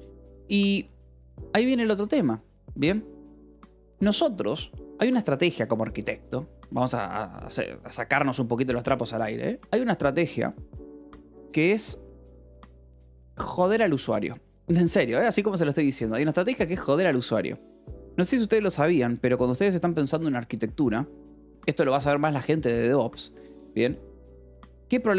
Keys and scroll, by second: 0.8 :, 0.9 space.